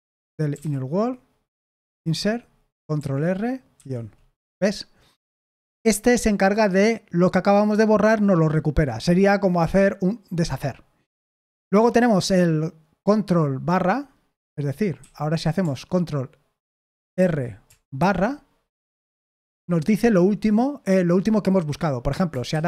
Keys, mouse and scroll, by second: 0.0-1.9 typing, 2.9 ctrl+r, 11.1 Escape, 15.0 a, 17.2 ctrl+r, 18.0 /, 19.1 Escape, 19.5 l.